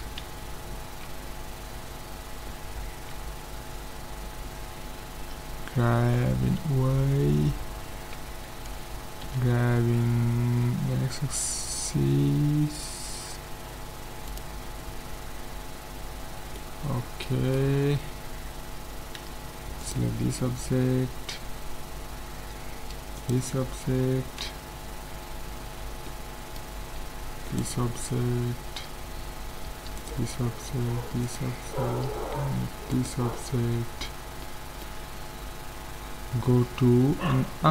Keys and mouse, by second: 5.2 g, 9.2 g, 14.6-18.5 middle drag, 17.8 z, 19.2 a, 23.6-25.3 right drag, 24.5 z, 25.5 middle click, 27.7-29.3 right drag, 29.3 middle click, 30.0-34.6 right drag, 34.5-37.7 middle drag.